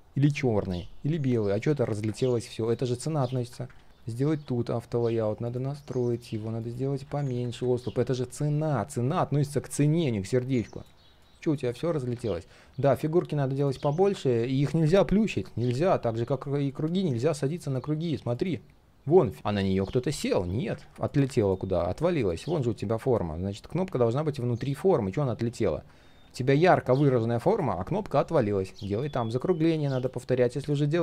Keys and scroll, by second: 3.7 ctrl+z, 3.9 ctrl+z, 20.2 ctrl+z, 20.8 ctrl+z, 23.9 ctrl+z.